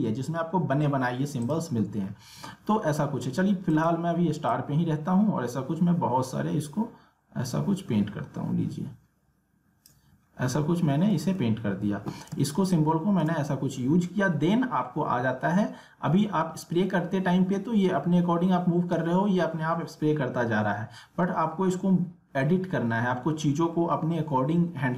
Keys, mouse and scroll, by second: 3.7-8.2 drag, 10.2 alt+scroll down 1, 10.8-11.1 alt+scroll up 1, 12.3 space, 12.7 click, 12.8 space.